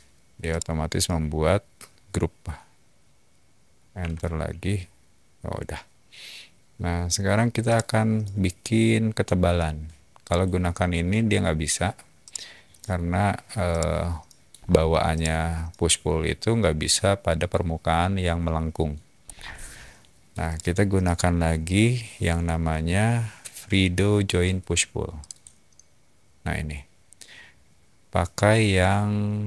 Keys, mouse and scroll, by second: 0.5-2.4 middle drag, 3.9 Return, 7.6 middle click, 10.2 click, 10.3 typing, 12.2 middle click, 12.8 typing, 13.7 middle click, 14.3 typing, 14.5 scroll up 1, 15.1-18.8 middle drag, 19.2 scroll down 1, 20.4 right click, 25.2 click.